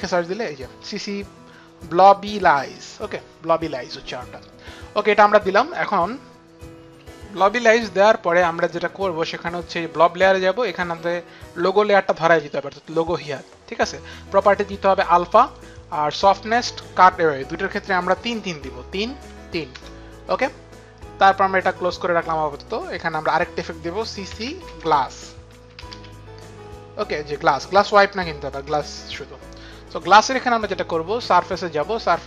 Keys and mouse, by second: 2.6 click, 2.8 click, 5.7 click, 20.0 Return, 20.0 KP_3, 20.2 Tab, 21.5 click, 23.2 click, 24.0-26.3 typing, 28.7-29.5 typing, 29.0 click.